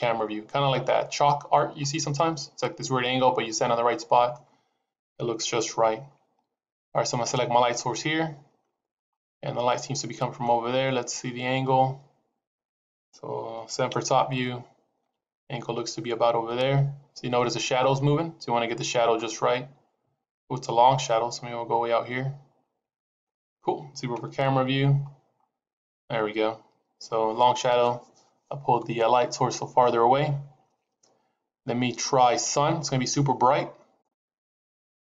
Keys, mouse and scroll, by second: 4.9 KP_0, 6.0-6.9 scroll down 4, 6.9 click, 8.9 scroll up 2, 9.8 middle click, 10.6 scroll down 4, 10.9 middle click, 13.8 KP_7, 14.9 g, 24.1 KP_0, 25.3-26.7 scroll up 1, 32.1-34.1 scroll up 2, 34.1 click.